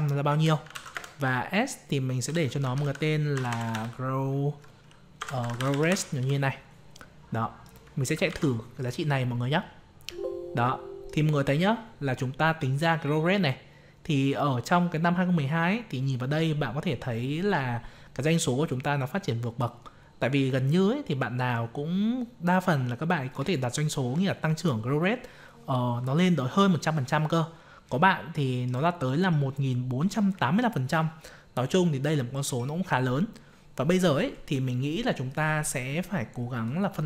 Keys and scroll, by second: 8.2 ctrl+c.